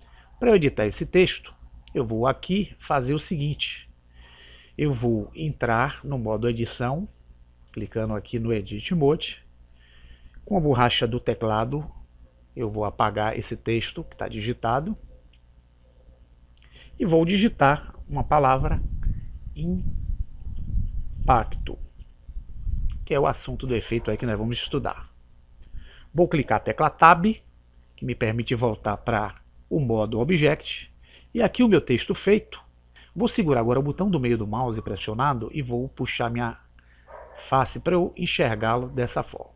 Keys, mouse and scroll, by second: 7.3 click, 14.0 BackSpace, 14.8 BackSpace, 15.2 BackSpace, 15.7 BackSpace, 18.4 shift+i, 19.2 shift+m, 20.3-22.0 typing, 27.6 Tab, 34.9-36.7 middle drag.